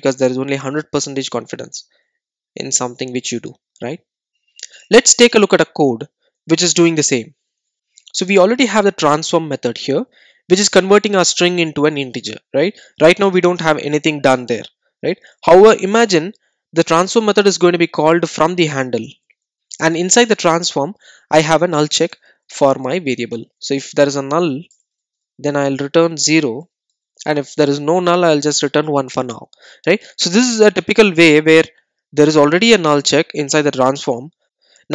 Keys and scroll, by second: 7.2 super+a, 22.2 Tab, 25.7 Tab, 28.2 Return.